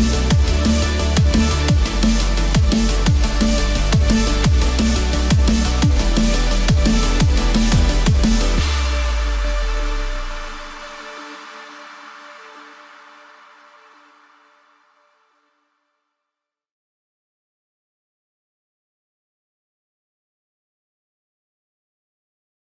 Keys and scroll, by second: 6.8 ctrl+-, 9.2 ctrl+=, 10.5 ctrl+-, 11.0 ctrl+0.